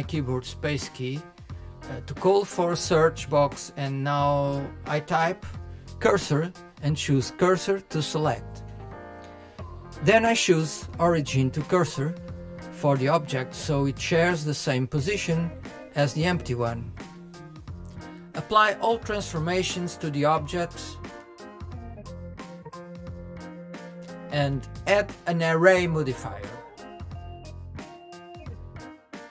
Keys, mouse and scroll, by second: 7.2 click, 11.8 click, 23.6 click, 24.1 click, 26.8 click.